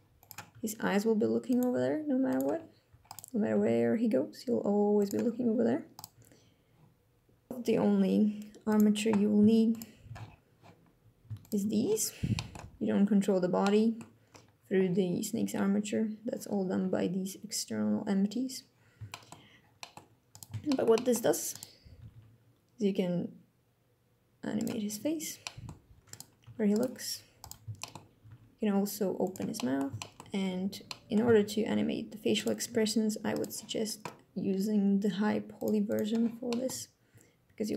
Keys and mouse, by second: 0.2 g, 1.2 click, 1.4 g, 2.0 click, 3.2 g, 4.7 click, 5.8 g, 7.3 click, 8.3 click, 9.4 shift+click, 11.1 shift+click, 12.0 click, 13.3 click, 18.7 shift+drag, 19.4 click, 20.3 shift+drag, 20.6 drag, 21.7 r, 21.8 r, 24.2 click, 25.1 drag, 26.1 g, 26.4 click, 27.5 shift+drag, 27.9 r, 28.0 x, 28.9 click, 29.2 middle click, 29.6 shift+middle click, 29.7 shift+click, 30.5 middle click, 32.4 g, 33.0 click, 35.3 click, 35.7-37.7 drag.